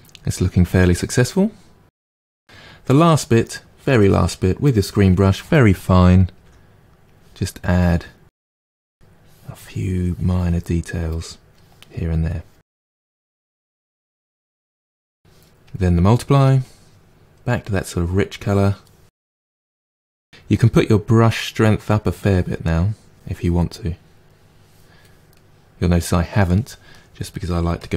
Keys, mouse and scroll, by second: 0.5 click, 0.7-2.4 middle drag, 6.3 f, 7.6-9.5 drag, 9.5 middle click, 9.8 click, 10.4 middle click, 10.6 click, 11.4 middle click, 11.9 click, 12.8 middle click, 13.3-18.5 drag, 19.2 click, 20.1 middle click, 21.1-24.6 drag, 24.6 middle click, 25.3-27.9 drag.